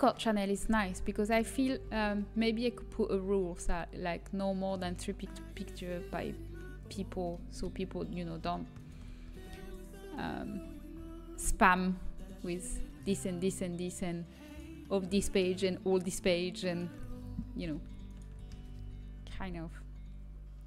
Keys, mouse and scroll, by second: 1.6 g, 7.3 middle click, 8.7 right click, 9.3 g, 14.8-16.6 middle drag, 17.8 ctrl+z, 18.6 g.